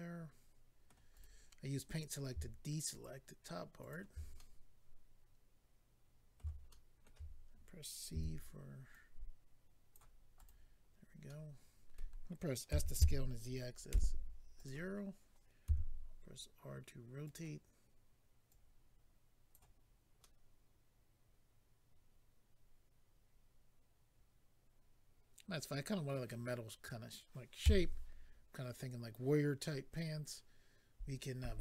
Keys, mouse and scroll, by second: 1.1 right click, 1.2 right click, 2.9 shift+click, 3.0 shift+click, 3.8 shift+click, 3.9 shift+click, 4.4 middle click, 6.7 shift+middle click, 7.0 middle click, 8.1 c, 8.9 click, 10.3 right click, 10.9 scroll down 2, 11.2 middle click, 12.7-13.9 typing, 14.5 click, 14.6 click, 15.6 r, 17.2 click, 17.3 click, 18.5 click, 19.8-20.2 scroll down 2, 20.2 middle click, 27.6 a.